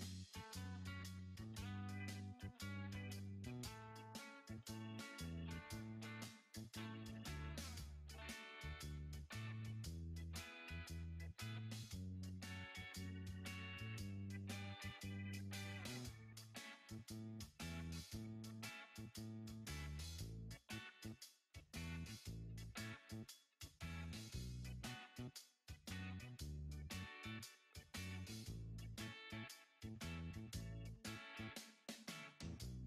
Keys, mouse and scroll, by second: 0.9 click, 3.0 click, 6.7 click, 8.9 click, 9.4 click, 10.5 b, 13.1 Tab, 14.2 click, 14.8 click, 15.4 Tab, 16.4 click, 17.4 b, 18.9 click, 23.0 click, 24.1 b, 25.6 b, 27.2 click, 29.9 click, 32.4 click.